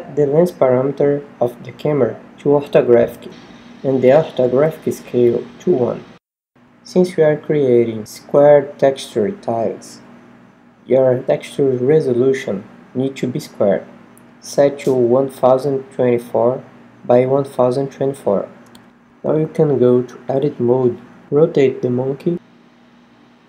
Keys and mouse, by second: 0.3 g, 2.1 click, 2.6 KP_0, 8.5-10.2 middle drag, 13.9-16.3 middle drag, 17.1-18.2 right drag, 18.2 Tab, 19.4 r, 21.9-23.4 drag, 22.6 s.